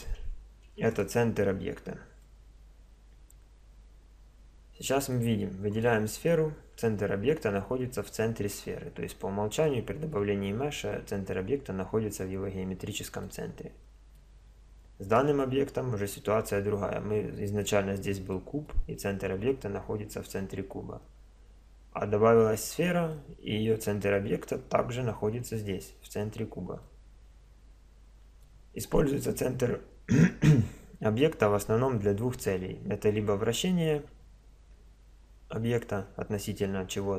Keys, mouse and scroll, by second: 0.9-2.1 right drag, 2.2-4.2 middle drag, 4.6 middle click, 5.8-6.2 drag, 6.2-10.1 middle drag, 13.2-15.0 middle drag, 18.3-21.6 middle drag, 23.1-26.7 middle drag, 26.8-31.8 middle drag.